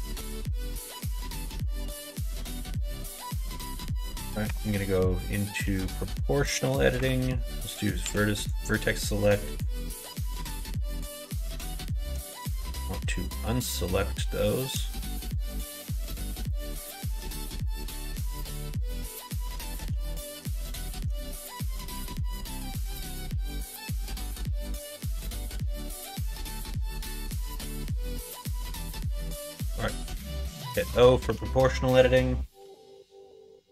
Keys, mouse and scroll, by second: 0.1 middle click, 0.8 middle click, 1.2 middle click, 2.0 click, 2.7 2, 3.4 alt+click, 4.4 0, 4.7 middle click, 5.7 middle click, 6.9 1, 8.0 b, 9.9 middle click, 10.4 ctrl+z, 10.9 shift+click, 12.4 ctrl+z, 15.9 b, 17.3 click, 18.3 ctrl+z, 18.9 shift+click, 19.9 ctrl+z, 20.4 shift+click, 21.2 shift+click, 22.1 ctrl+z, 22.6 shift+click, 23.2 shift+click, 23.9-25.1 middle drag, 25.5 middle click, 25.8 g, 27.1 ctrl+z, 27.7 o, 30.5 middle click, 31.2 g.